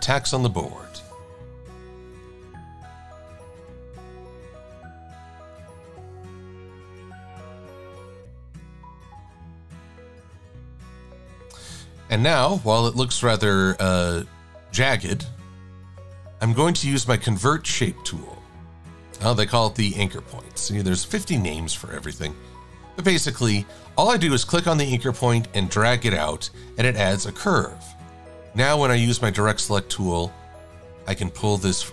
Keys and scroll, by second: 6.8 =, 28.6 a.